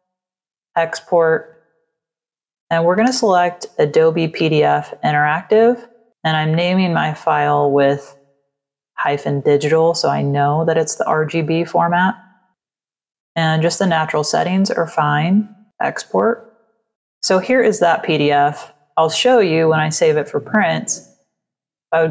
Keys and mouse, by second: 0.8 click, 2.3 click, 5.1 click, 6.3 click, 7.5 click, 13.1 click, 20.3 click, 21.4 click.